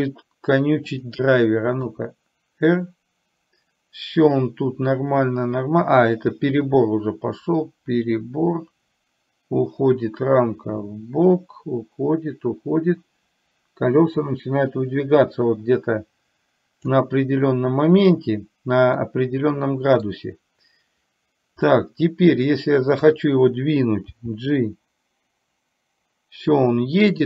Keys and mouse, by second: 1.0-1.3 drag, 2.0-17.1 drag, 19.1-20.1 middle drag, 21.7-23.1 middle drag, 24.2 g.